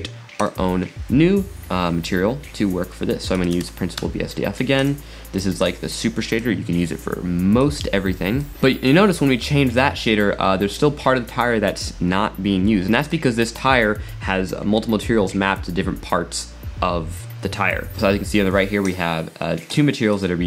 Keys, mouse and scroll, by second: 5.6-9.3 drag, 13.0 click, 18.9 click, 19.7-20.3 drag.